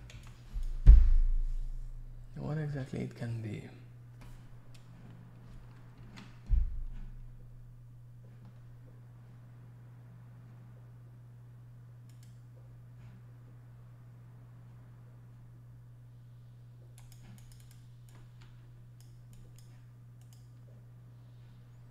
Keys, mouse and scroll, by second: 0.1 alt+z, 0.2 click, 0.9 middle click, 6.0 ctrl+shift+Escape, 17.4 click, 17.5 click, 17.6 click, 17.7 double click, 18.1 click, 19.3 click, 20.2 click, 20.3 click.